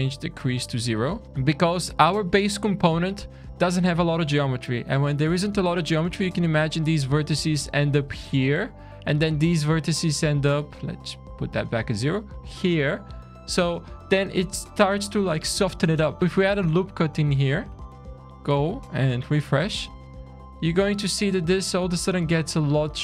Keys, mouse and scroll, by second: 0.7 shift+scroll down 1, 0.9 scroll up 3, 1.3 middle click, 1.3 scroll down 3, 4.5 scroll down 2, 4.7-5.8 scroll up 1, 5.8-6.3 scroll down 4, 6.4 middle click, 9.7 click, 9.9 click, 10.6 middle click, 12.1-13.8 scroll up 3, 14.6 click, 15.0 Tab, 15.5 ctrl+r, 16.2 Tab, 16.2 scroll down 2, 16.3-17.1 scroll down 5, 17.1 click, 17.9 q, 18.6 scroll up 4, 18.9 alt+a, 19.4 shift+scroll down 3, 19.9 shift+middle click, 21.2-21.6 scroll up 5, 21.7-22.4 scroll down 4, 22.4 middle click, 22.9 click.